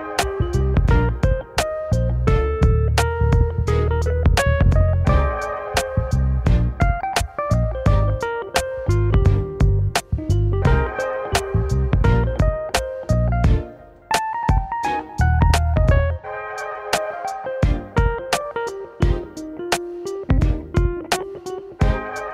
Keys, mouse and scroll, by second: 0.5 alt+shift+click, 1.0 alt+shift+click, 1.5 alt+shift+click, 2.7 scroll down 3, 3.0 middle click, 3.9-4.5 scroll up 1, 4.5-6.6 middle drag, 6.6-8.0 scroll down 1, 9.3-10.6 drag, 10.6 Tab, 11.4 middle click, 11.8 scroll down 2, 12.1 middle click, 12.5 KP_1, 15.3 click, 16.4 KP_1, 16.8-17.4 scroll up 7, 17.4-18.0 middle drag, 18.0-19.9 drag.